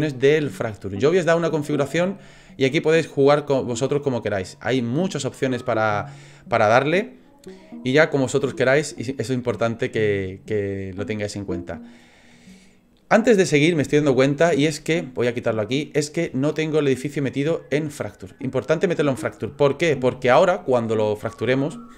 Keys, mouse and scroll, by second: 17.0 click.